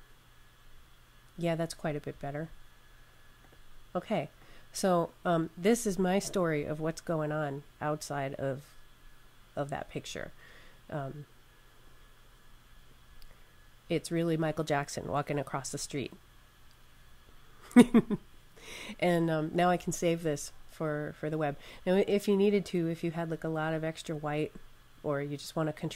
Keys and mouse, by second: 3.3 click, 6.8 click, 11.7 click.